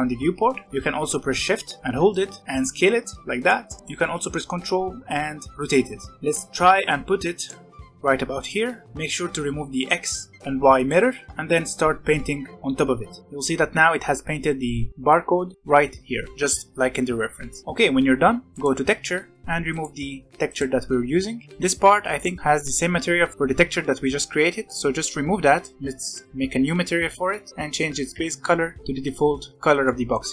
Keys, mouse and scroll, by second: 6.1 scroll up 4, 6.3-8.8 right drag, 8.8-9.9 scroll down 2, 9.9 click, 10.7 click, 11.6-13.2 drag, 13.2 scroll down 3, 17.6-18.5 right drag, 18.5-20.4 drag, 21.4 click, 22.1 click, 23.3-25.5 middle drag, 25.5-28.1 drag, 28.1 e, 29.5 middle click.